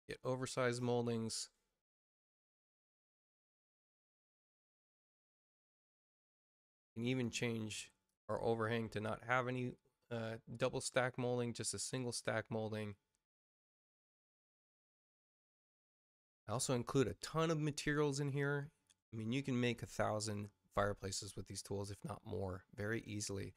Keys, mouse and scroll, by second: 4.3 click, 6.2 click, 7.0 click, 8.0 click, 13.3 space, 13.8 click, 14.7 space, 15.2 click, 23.3 middle click.